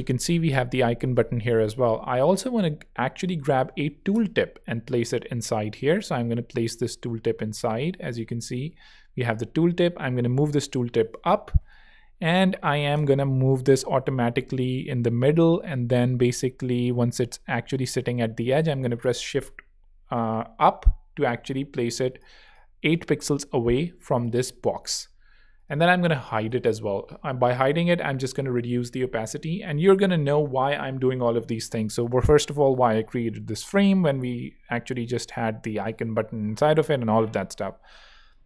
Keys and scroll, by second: 2.5 alt+super+2, 2.8-4.2 typing, 13.1 alt+shift+Up, 14.4 alt+shift+Up, 14.6 alt+shift+h, 15.4 alt+shift+h, 15.8 alt+shift+Up, 17.0 alt+Up, 17.2 alt+Down, 17.8 alt+shift+Down, 18.5 alt+shift+Up, 22.2 alt+z, 22.9 z, 24.6 alt+z, 26.2 0, 26.9 alt+0, 27.8 alt+l.